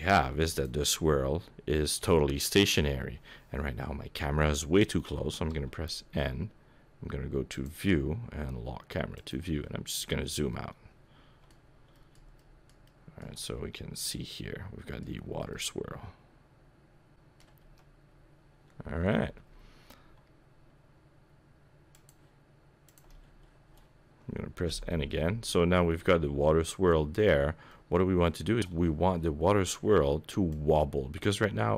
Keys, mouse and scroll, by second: 0.9 KP_0, 5.4 n, 7.5 click, 9.1 click, 9.7-10.5 scroll down 6, 10.5 middle click, 11.6-11.9 scroll down 1, 11.9 middle click, 12.3 shift+middle click, 12.8 shift+middle click, 13.3 middle click, 15.1-15.8 scroll down 2, 15.5 middle click, 17.6 g, 22.8 click, 24.6 n, 25.0 middle click, 27.0-28.0 scroll up 6, 27.6 middle click, 30.5 click.